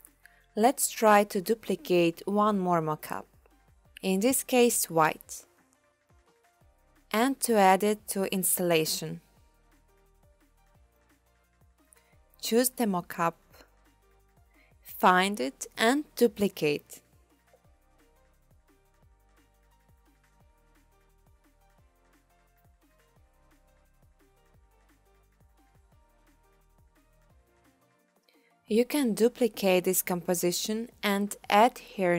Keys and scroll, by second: 17.7 2, 29.4 Return, 30.4 2, 31.0 Return.